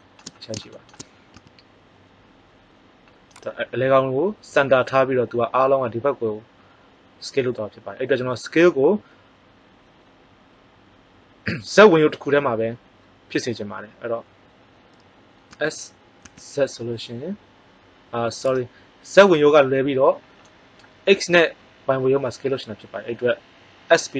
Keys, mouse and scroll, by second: 1.3 s, 14.6 middle click, 15.4 s, 18.5-20.1 drag.